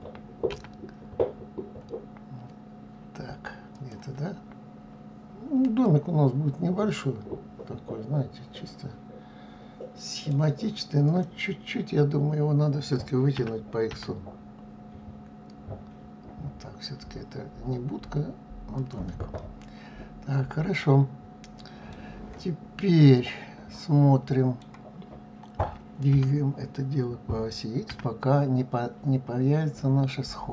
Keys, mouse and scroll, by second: 5.4-8.5 middle drag, 10.7 click, 13.0 s, 19.0-22.0 middle drag, 22.7-25.7 middle drag, 25.7 g.